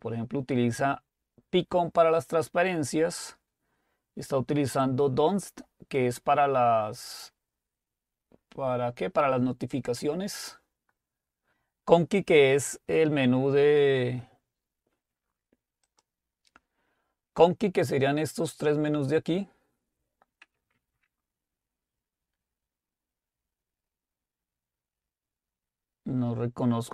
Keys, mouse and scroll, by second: 1.2 click, 6.4 click, 15.9 click, 20.8 alt+Tab.